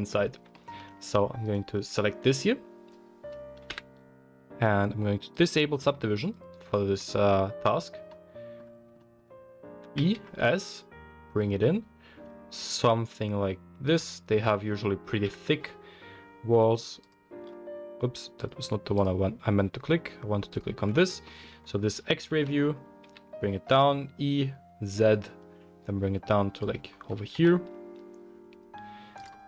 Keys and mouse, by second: 0.1 Tab, 1.4 alt+click, 3.6 KP_1, 6.3 click, 8.0-16.9 middle drag, 9.8 e, 15.2 KP_1, 16.9 click, 17.1-18.9 middle drag, 18.4 click, 18.9 click, 19.1-20.5 middle drag, 20.5-26.6 drag, 22.3 e, 26.6-29.4 middle drag, 27.3 s.